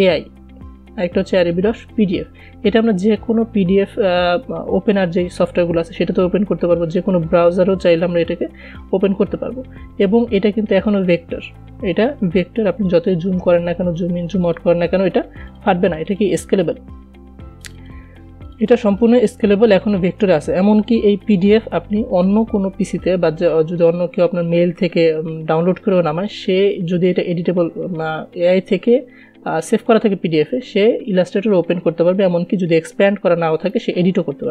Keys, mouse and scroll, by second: 1.8-5.8 drag, 7.1-11.7 drag, 11.8 scroll down 1, 12.7-14.2 scroll up 1, 14.8-34.1 drag, 34.1-34.5 drag.